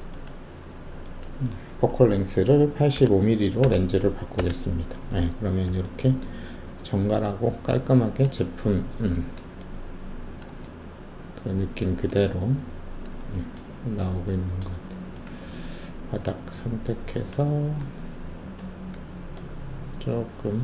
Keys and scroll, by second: 2.9 8, 3.6 5, 4.3 Return, 17.8 w.